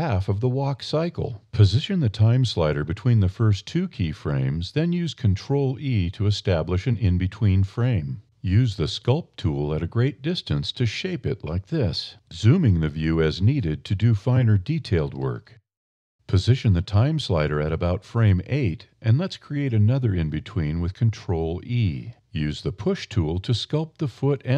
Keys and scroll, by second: 2.8 ctrl+f, 7.3 d, 7.5 e, 9.6 e, 12.1 e, 14.7 e, 19.7 ctrl+e, 24.4 e.